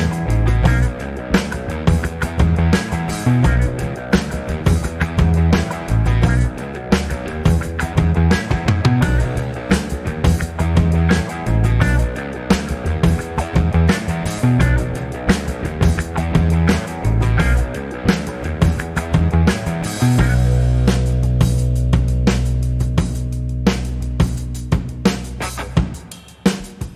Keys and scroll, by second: 0.0-0.3 typing, 1.9 BackSpace, 2.2 BackSpace, 4.3 e, 5.5 p, 8.1 typing, 10.3-12.5 typing, 15.8 BackSpace, 23.4 alt+BackSpace.